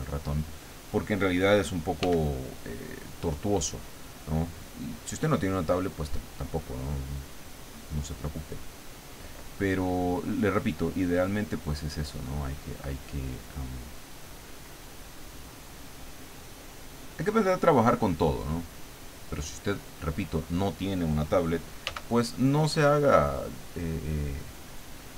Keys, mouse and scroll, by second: 2.0 f, 3.9 click, 4.6-9.2 drag, 11.5 click, 12.1 click, 12.9 click, 13.9 click, 14.9 click, 16.2 click, 18.2-20.1 drag, 21.8 f, 23.9 click.